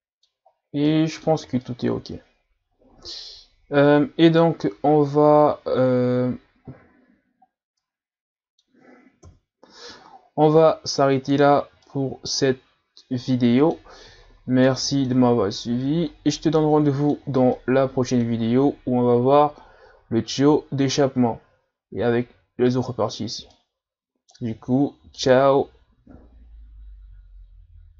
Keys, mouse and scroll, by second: 0.5 scroll down 1, 0.9-1.3 middle drag, 1.3 a, 1.6-4.7 middle drag, 5.9-6.9 scroll down 1, 6.9-7.5 scroll down 1, 7.5 scroll down 1, 7.8-9.2 middle drag, 9.2 KP_Divide, 11.3-11.8 scroll down 1, 11.8-14.2 middle drag, 14.2-14.7 scroll down 2, 14.7-15.5 middle drag, 15.5-16.0 scroll up 1, 16.0 scroll up 2, 16.1 scroll down 3, 16.4-18.9 middle drag, 18.9-20.2 scroll up 1, 20.2-21.9 scroll up 1, 23.5-26.5 middle drag.